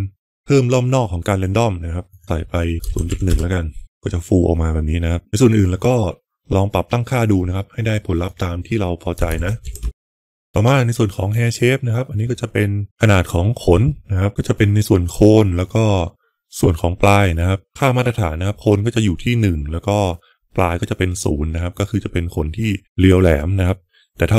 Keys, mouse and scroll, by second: 2.0-3.8 drag, 8.4-9.9 drag, 11.2 click.